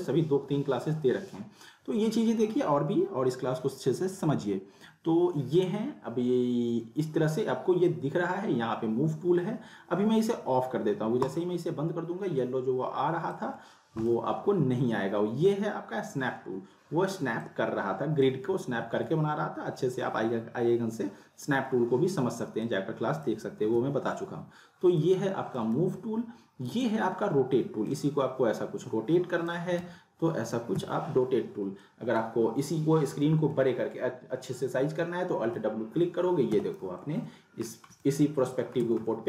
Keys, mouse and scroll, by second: 11.3-16.5 drag, 13.6-14.2 click, 17.4-18.3 drag, 18.8 z, 22.6 z, 22.6-23.2 click, 23.6 ctrl+z, 25.0-25.6 click, 25.8 z, 26.7-29.7 drag, 30.7 z, 31.6 scroll down 1, 31.8 middle click, 31.8-32.4 middle drag, 35.4 alt+w, 36.5 z, 37.0-37.6 alt+middle drag, 38.8 z, 39.1-39.2 middle click.